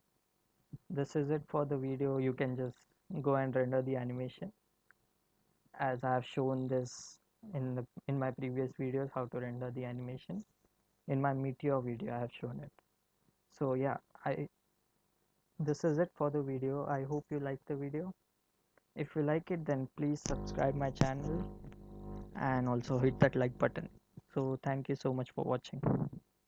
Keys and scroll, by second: 1.0 space.